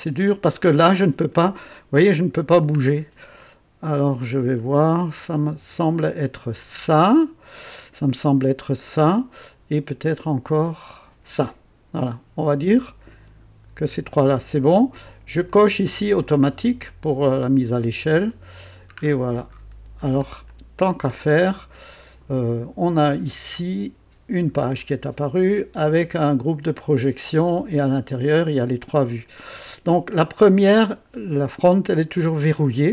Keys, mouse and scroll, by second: 0.5-0.8 scroll up 2, 1.4 middle click, 2.1-2.8 scroll down 3, 10.1 click, 15.4 click, 16.2 click, 18.2 click, 19.0-20.3 scroll up 5, 20.5-21.2 right drag, 23.1-23.5 scroll down 2, 24.6 click, 25.0 scroll down 2, 26.3 click, 27.8 scroll down 2, 32.1 click.